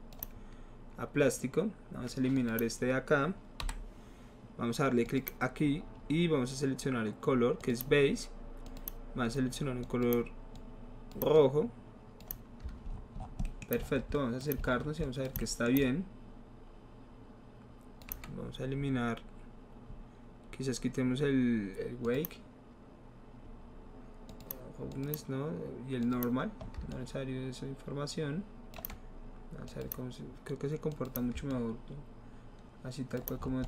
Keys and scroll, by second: 3.7 Delete.